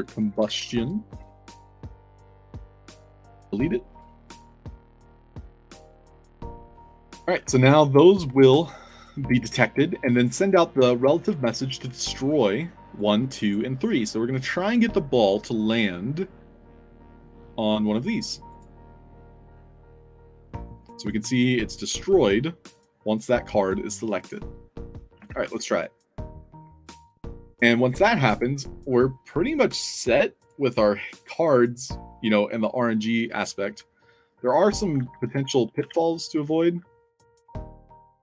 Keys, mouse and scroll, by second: 0.0-1.1 typing, 2.2 click, 4.7 middle click, 4.9-6.9 typing, 5.9 alt+drag, 6.3 middle click, 7.4 alt+click, 8.6 w, 9.0 w, 10.2 click, 12.2 click, 12.9 click, 13.3 click, 17.2 middle click, 18.4 click, 25.2 ctrl+s, 30.3 click, 31.3 click, 33.7-38.2 typing.